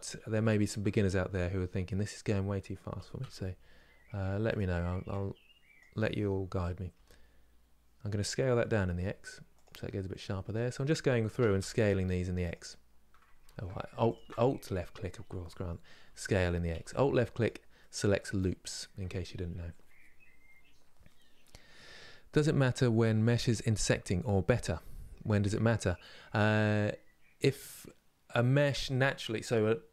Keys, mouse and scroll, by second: 0.3 alt+click, 2.6 s, 13.1 ctrl+z, 13.8 alt+click, 15.8 s, 17.4-29.9 middle drag.